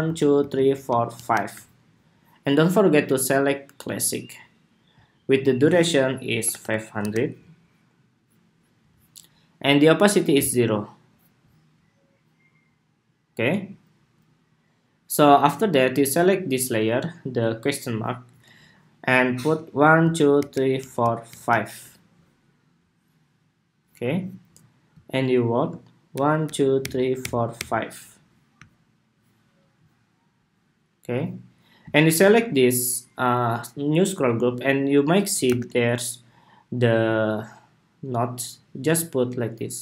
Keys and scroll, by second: 35.2 super+=.